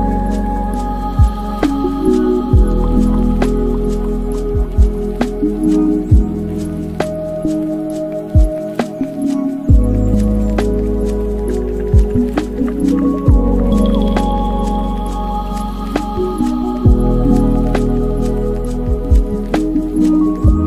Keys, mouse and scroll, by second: 1.7 KP_3, 3.0-4.6 ctrl+middle drag, 4.6-7.6 shift+drag, 8.2 space, 10.4-12.7 middle drag, 12.7-13.4 scroll down 3, 13.4 space, 13.7-14.2 scroll down 4, 14.2-15.3 middle drag, 15.3 shift+a, 17.5-18.7 ctrl+middle drag, 18.7 alt+KP_0, 19.4 scroll down 2.